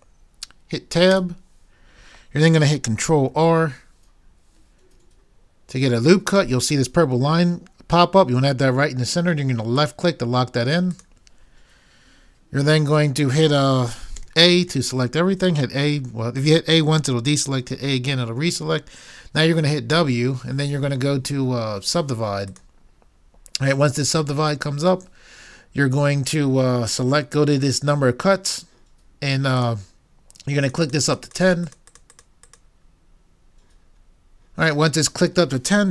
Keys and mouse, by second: 1.1 Tab, 3.3 ctrl+r, 14.3 a, 14.7 a, 19.9 w, 30.7 click.